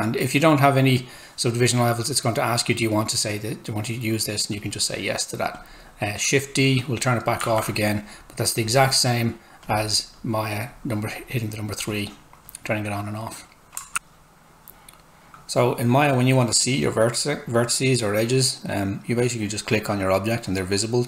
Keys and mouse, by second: 13.9 click, 16.5 click.